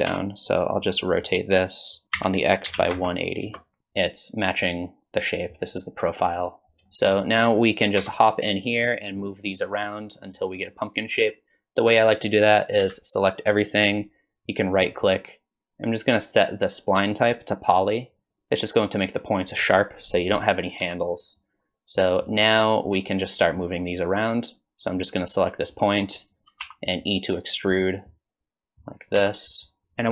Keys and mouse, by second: 0.1 r, 3.8 KP_1, 6.9 shift+middle click, 8.0 Tab, 9.6 click, 12.8 a, 15.3-18.1 drag, 20.8 g, 26.6 e, 29.2 e.